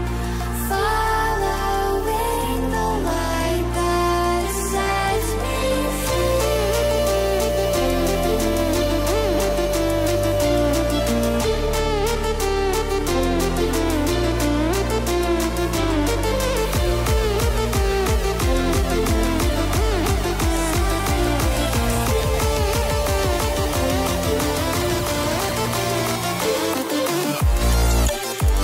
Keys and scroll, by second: 8.3 ctrl+t, 11.8 ctrl+alt+t.